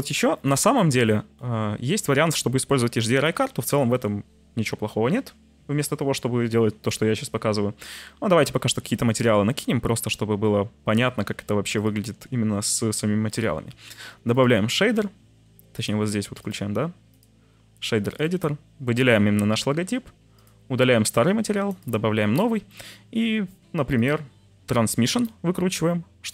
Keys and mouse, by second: 0.9 middle click, 7.8-8.8 drag, 11.7-13.4 drag, 14.3 click, 15.8-16.4 drag, 17.1 click, 20.4 click, 22.8 click, 23.9 click, 24.7 click.